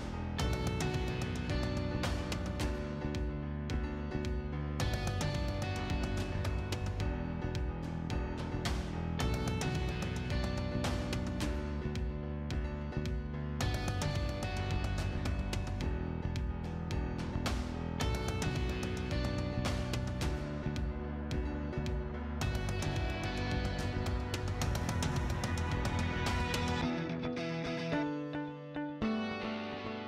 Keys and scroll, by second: 2.6 space, 2.9 6, 3.1 Return, 4.6 Escape, 5.1 o, 5.3 space, 5.6 6, 5.9 Return, 7.4 Escape, 7.9 t, 8.3 space, 16.2 Escape, 25.0 p, 25.4 space.